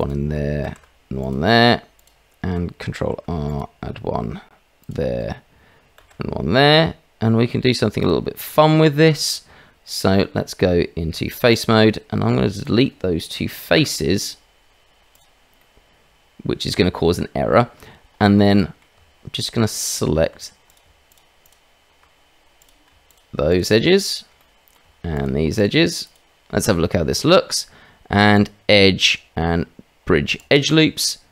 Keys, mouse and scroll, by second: 0.6 ctrl+r, 2.9 ctrl+r, 6.3 ctrl+r, 9.8 click, 10.3 Tab, 11.8 click, 13.7 Delete, 15.5-17.0 middle drag, 17.5 shift+middle click, 18.5 middle click, 18.9 Tab, 20.7 click, 21.0 shift+click, 21.4 shift+click, 23.4 shift+click, 24.3 middle click, 25.2 shift+click, 26.0 shift+click, 28.3-30.5 drag, 31.0 middle click.